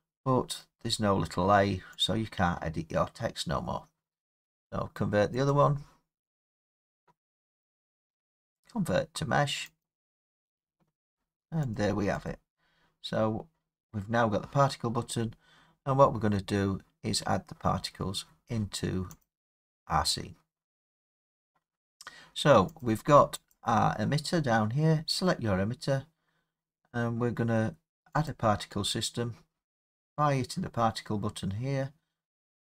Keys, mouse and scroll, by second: 2.0-7.8 drag, 9.8 click, 11.8 click, 12.3 click, 17.0 middle click, 17.2 middle click, 19.2 click, 22.8 click, 23.5 click, 28.3 click, 32.4-32.7 drag.